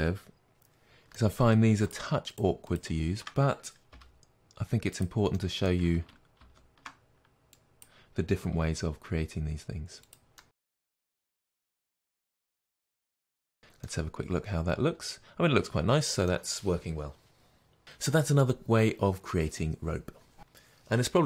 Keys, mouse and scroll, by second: 1.8 shift+click, 3.8 g, 5.6-7.8 middle drag, 6.3 ctrl+z, 7.7 click, 8.5 g, 10.3-11.6 middle drag, 11.1 g, 11.6 click, 11.7-21.2 middle drag, 13.5 Tab, 19.4-21.2 scroll down 2.